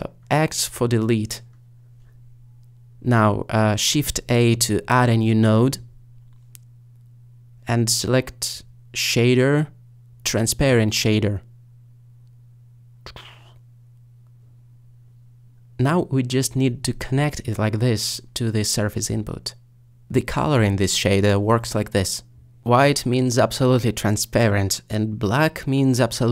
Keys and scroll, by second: 1.2 x, 6.0 a.